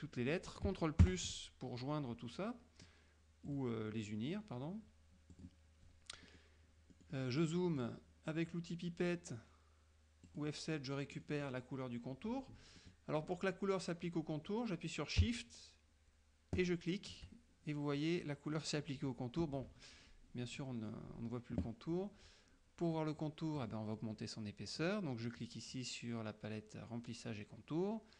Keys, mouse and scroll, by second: 1.1 ctrl+KP_Add, 3.6 click, 5.4 click, 6.3 middle click, 7.0-8.1 middle drag, 10.4 click, 11.3 middle click, 12.9 middle click, 16.7 shift+click, 23.7 click.